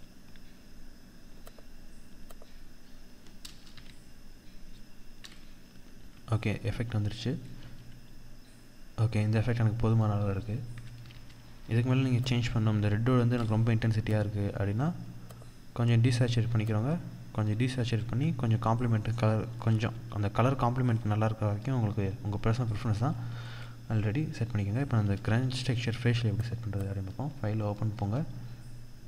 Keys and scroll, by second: 3.1 Delete, 5.5 ctrl+=, 6.9 ctrl+0, 10.5 ctrl+=, 17.2 ctrl+0, 19.1 ctrl+=, 22.6 ctrl+0, 24.4 ctrl+=, 25.7 ctrl+=.